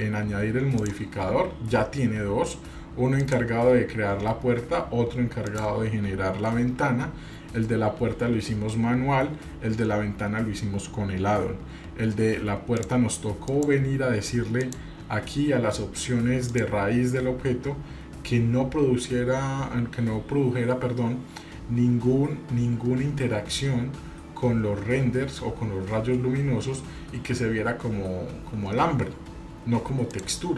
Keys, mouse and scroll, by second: 0.8 click, 3.2 click, 5.5 click, 12.7 click, 13.5 click, 14.6 click, 16.5 click, 17.0-18.5 scroll down 7, 26.4 scroll down 3, 30.1 click.